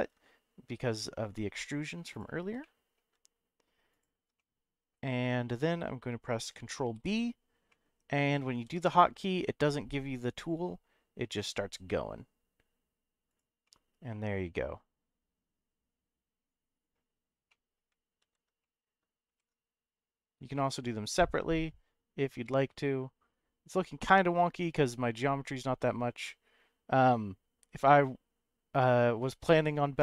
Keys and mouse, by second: 1.0 alt+shift+click, 2.1 alt+shift+click, 2.6 middle click, 4.4 middle click, 6.9 ctrl+v, 7.7 middle click, 8.5 ctrl+b, 13.3 click, 13.6-16.9 middle drag, 17.5 middle click, 18.2 ctrl+z, 18.7 middle click, 19.2 ctrl+b.